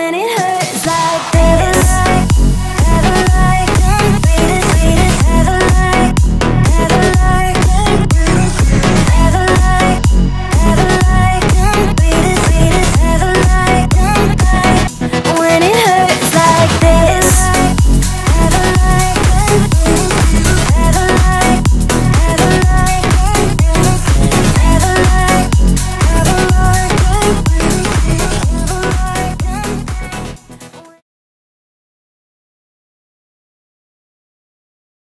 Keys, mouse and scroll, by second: 0.9-1.6 alt+scroll down 2, 1.6 alt+scroll up 1, 2.2 click, 6.4-12.0 drag, 10.7-11.5 drag, 13.4-13.8 alt+scroll down 1, 14.0-14.7 alt+scroll up 1, 15.2 alt+scroll down 1, 15.9 click, 21.1 click, 21.4 scroll, 21.5-21.9 alt+scroll up 2, 23.2-23.8 alt+scroll up 2, 23.8-24.3 scroll down 3, 24.3 alt+scroll up 1, 26.3 click, 29.0 click, 30.5-31.2 typing.